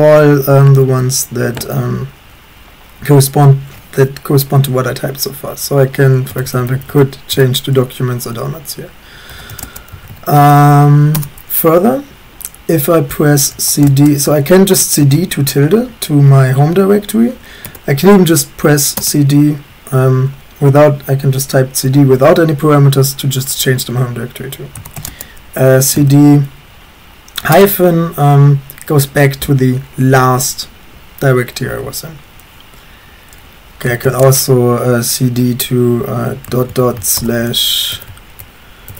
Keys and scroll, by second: 0.5 typing, 0.7 Tab, 1.5 Tab, 6.3-10.4 typing, 11.1 Return, 12.9-13.9 typing, 15.0 typing, 17.7 BackSpace, 18.7 BackSpace, 19.0 Return, 24.6-25.9 typing, 27.5 Return, 33.7-37.9 typing.